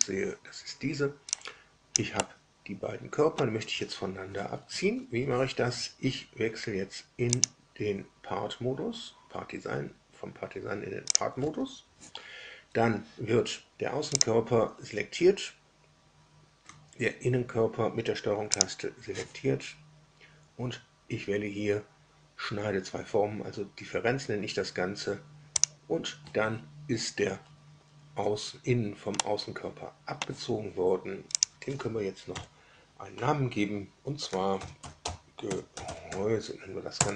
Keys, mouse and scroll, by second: 1.3 click, 2.1-3.5 middle drag, 7.3 click, 11.1 click, 14.1 click, 18.5 ctrl+click, 25.5 click, 29.1 middle click, 29.4 scroll down 1, 31.3 click, 32.2 F2, 34.2-36.6 typing, 36.9 Return.